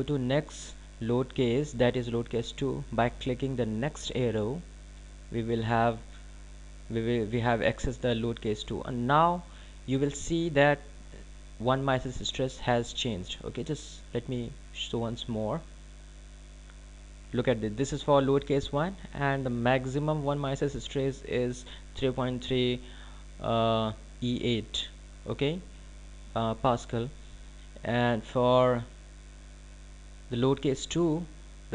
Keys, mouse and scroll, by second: 7.7 click, 19.6 click.